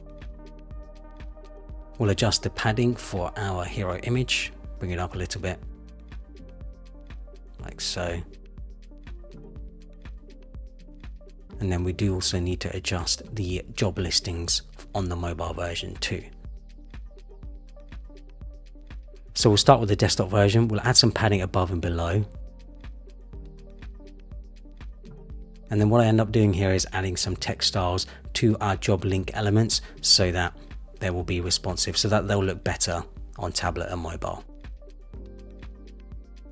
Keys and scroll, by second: 7.3 shift+Down, 7.9 shift+Down, 12.5 super+=, 21.9 shift+Up, 23.3 shift+Up, 32.6 super+=.